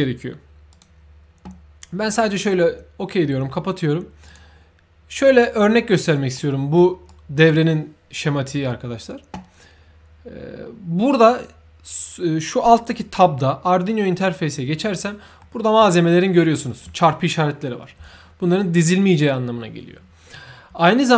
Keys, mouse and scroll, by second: 0.6 click, 4.2 click, 6.3 middle click, 7.0 right click, 14.1 click, 15.1 scroll up 1, 15.3 middle click.